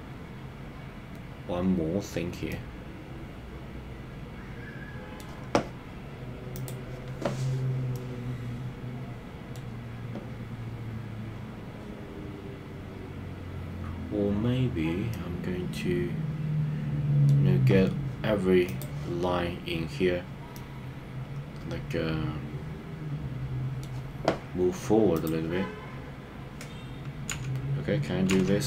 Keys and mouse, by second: 2.4-5.1 middle drag, 6.6 click, 7.9-9.5 middle drag, 15.1-17.3 middle drag, 18.7 click, 20.5-23.8 middle drag, 24.3 right click, 25.2 click, 27.3 KP_3, 28.3 KP_3.